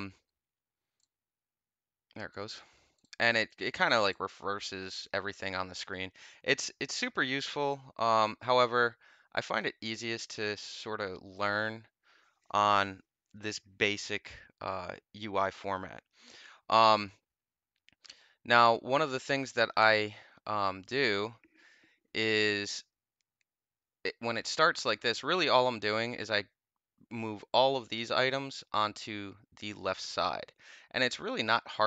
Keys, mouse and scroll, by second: 0.9 click, 2.9 click, 3.9 click, 9.2 click, 11.2 click, 12.7-19.4 middle drag, 19.4 click, 19.5-23.5 middle drag, 31.6-31.8 drag.